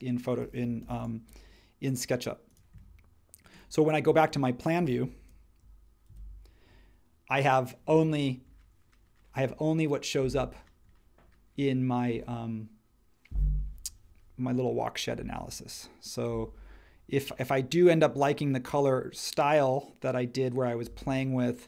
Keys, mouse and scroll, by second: 0.8 m, 4.0 space, 6.0 super+1.